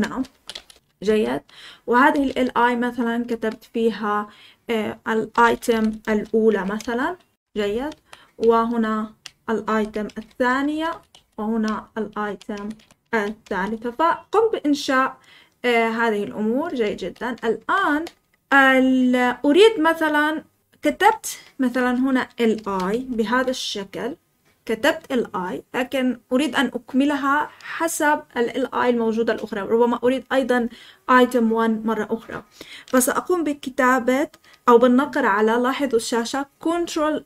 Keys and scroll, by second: 0.0-2.6 typing, 1.0 Escape, 5.0-13.9 typing, 6.7 Escape, 16.9 o, 17.3 Return, 17.5 Return, 17.8 Return, 20.8-23.7 typing.